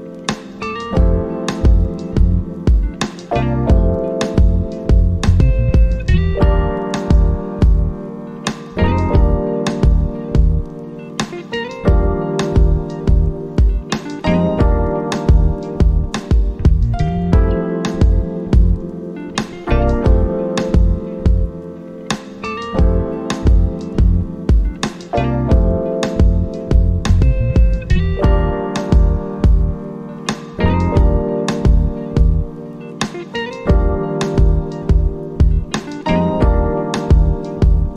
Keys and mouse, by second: 0.3 click, 3.9-9.1 drag, 9.1 click, 12.8 right click, 14.5-28.3 drag, 28.3 click, 28.5-32.4 drag, 36.6 click.